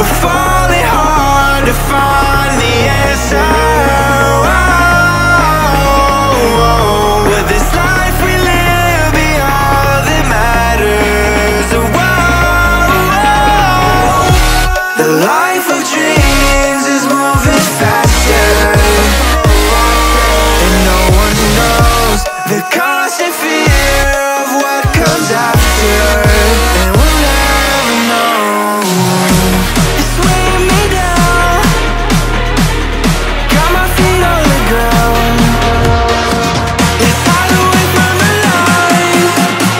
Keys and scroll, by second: 0.0-1.6 typing, 2.7 Return, 2.8-6.4 typing, 13.6 Return.